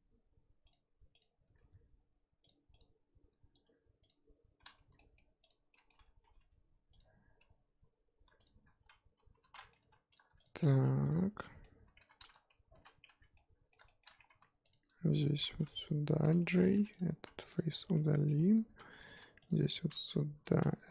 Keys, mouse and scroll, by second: 1.2 click, 1.4 g, 2.8 click, 3.3 g, 4.0 click, 4.9 z, 4.9-5.5 middle drag, 5.5 click, 5.7 z, 5.7-6.3 middle drag, 6.3 g, 8.4 shift+click, 9.3 j, 9.5 middle drag, 9.8 3, 10.1 click, 10.4 shift+click, 11.1 x, 11.4-12.0 middle drag, 12.0 Tab, 12.7 shift+h, 13.0 Tab, 13.3-14.2 middle drag, 14.2 1, 14.7 click, 15.2 shift+click, 16.2 j, 16.4-16.7 middle drag, 16.7 3, 17.0 click, 17.6 x, 17.8 scroll down 2, 18.0-18.3 middle drag, 18.3-18.8 scroll up 2, 18.8 1, 19.1 click, 19.5 shift+click, 20.3 j.